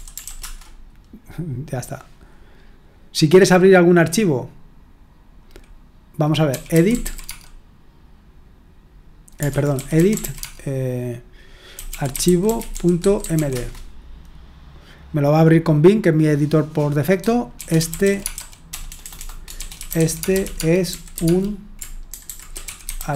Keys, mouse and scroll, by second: 0.0-0.7 typing, 6.2-7.5 typing, 9.5-13.8 typing, 17.3-23.1 typing.